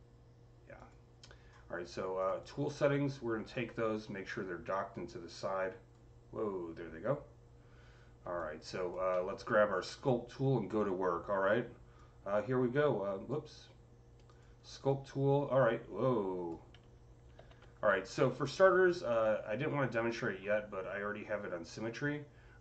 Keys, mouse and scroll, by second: 0.6 click, 2.1 click, 2.3 double click, 3.4-8.2 drag, 8.2-11.8 alt+drag, 9.1-14.1 alt+middle drag, 11.8-14.7 drag, 14.7-19.9 drag, 17.2 ctrl+z, 22.5 click.